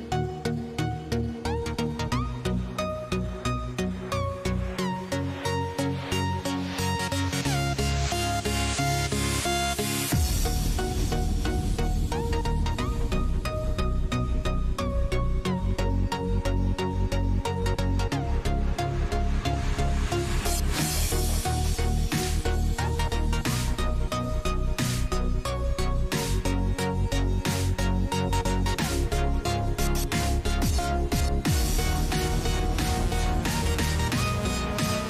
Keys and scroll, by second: 12.3 ctrl+a, 16.1 ctrl+c, 19.1 ctrl+v, 22.9 ctrl+t.